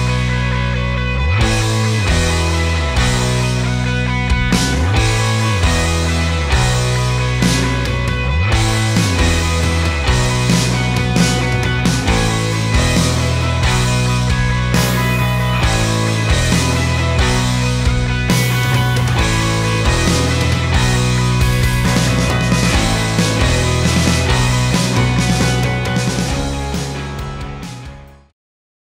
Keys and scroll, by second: 1.2 ctrl+s.